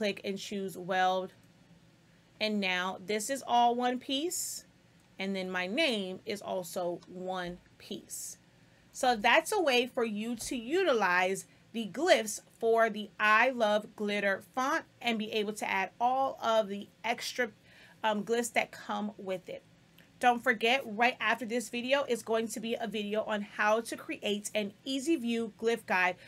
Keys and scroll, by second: 8.0 space.